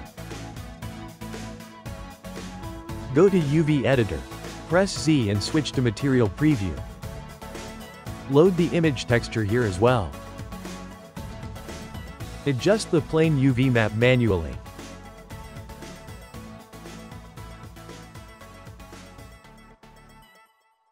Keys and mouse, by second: 1.8-3.2 shift+middle drag, 3.2-5.1 drag, 5.1 z, 8.7 click, 11.5-12.9 ctrl+middle drag, 13.9 click, 15.2 click, 15.6 g, 17.0 click, 17.4 g, 18.3 click, 18.5 g, 19.8 click, 20.1 g.